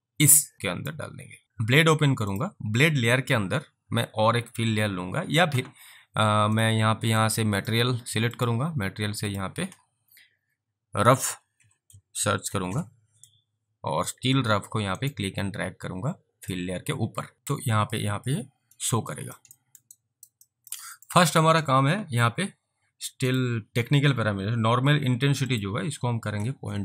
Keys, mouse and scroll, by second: 1.4 click, 6.6 click, 7.3 click, 8.4 click, 11.0-13.0 typing, 14.4 click, 15.0 right click, 19.2 alt+click, 19.6 alt+middle click, 20.0 alt+right click, 20.5 alt+click, 21.0 alt+middle click, 21.3 alt+right click, 23.3 click, 25.5 click, 26.4 typing.